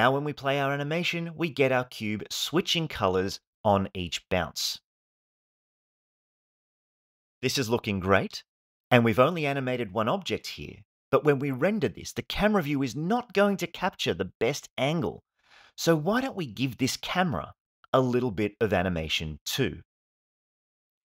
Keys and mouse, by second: 7.2 space, 12.0 space.